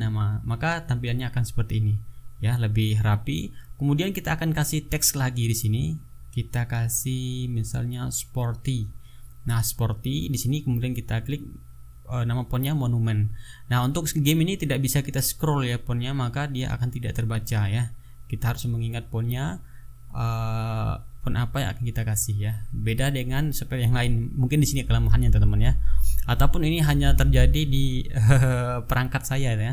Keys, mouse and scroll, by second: 0.4-0.8 ctrl+scroll down 1, 0.9 ctrl+scroll up 1, 3.3 click, 3.9 click, 6.9-8.9 typing, 10.9-12.0 typing, 17.2 click, 19.5 click, 22.6 click, 23.6 click, 24.7 click, 27.0 click, 28.0 KP_1, 28.2 KP_0, 28.7 Return.